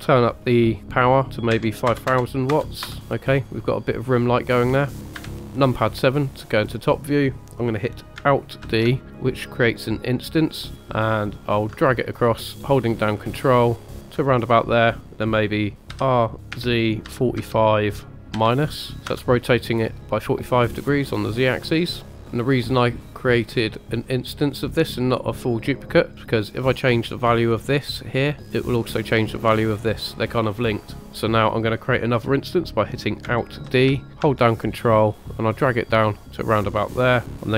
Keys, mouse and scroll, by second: 2.1 KP_0, 5.0 click, 5.2 KP_7, 8.7 alt+d, 13.9 ctrl+click, 15.9-18.3 typing, 19.1 Return, 21.1-22.1 middle drag, 22.1 KP_0, 22.3-22.9 middle drag, 23.0-23.8 scroll down 4, 26.1 click, 27.8 click, 28.9 click, 33.8 alt+d, 36.5 ctrl+click.